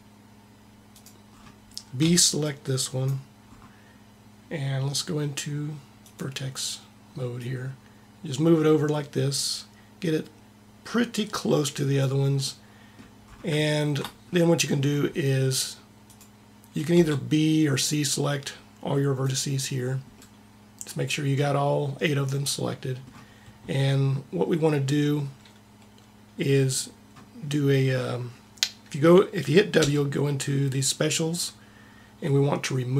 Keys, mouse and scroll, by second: 0.7-2.0 drag, 1.9 b, 2.9 b, 5.9-8.9 drag, 16.8 b, 22.2 middle click, 29.7 w.